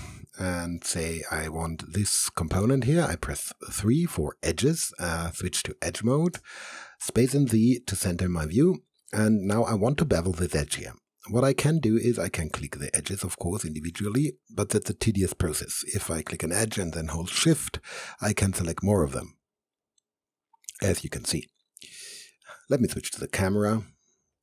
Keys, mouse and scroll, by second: 0.1 alt+right click, 0.9 click, 2.9 3, 4.9 3, 5.1 alt+click, 6.1 alt+space, 6.3 alt+z, 7.6 alt+z, 8.1 right click, 9.0 alt+click, 9.5-10.9 alt+middle drag, 10.9-12.8 alt+drag, 19.3-20.7 alt+right drag, 20.7 alt+click, 21.3 alt+middle click, 21.9 alt+right click.